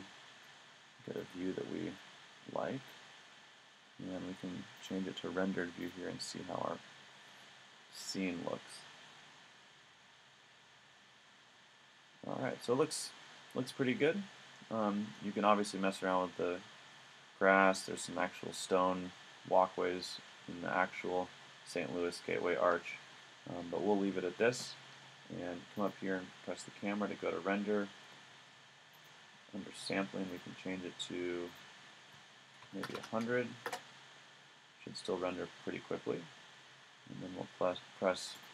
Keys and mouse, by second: 0.4-1.4 middle drag, 5.9 click, 33.0 KP_0, 37.1-38.5 middle drag.